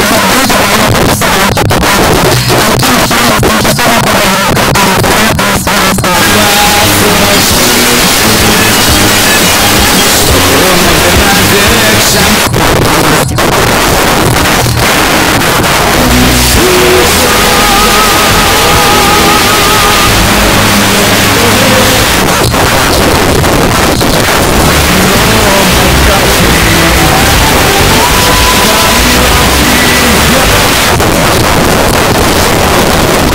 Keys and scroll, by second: 1.8 Up, 1.8 g, 2.3 Up, 2.9 Return, 12.3 Page_Down, 22.0 Page_Down, 30.6 Page_Down.